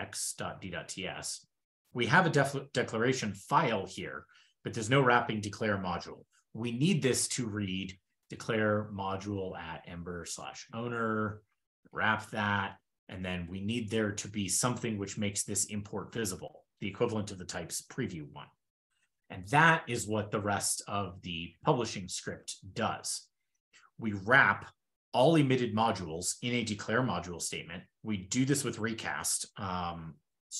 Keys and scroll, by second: 3.0 super+Page_Up, 4.2 super+Page_Down, 6.1 super+Up, 6.9 ctrl+p, 10.5 ctrl+e, 11.0 shift+super+Down, 11.8 super+s, 12.6 ctrl+e, 12.7 ctrl+n, 13.2 shift+super+\, 18.8 super+w, 20.2 super+w, 20.5 super+w, 20.6 super+w, 20.8 super+p.